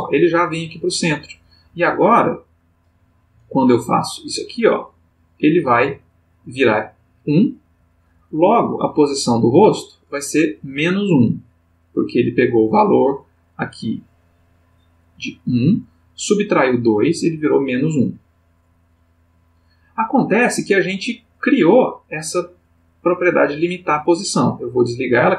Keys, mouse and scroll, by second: 2.7 click, 4.4-5.6 drag, 9.1 click, 13.7 click, 17.4 click, 18.7 click.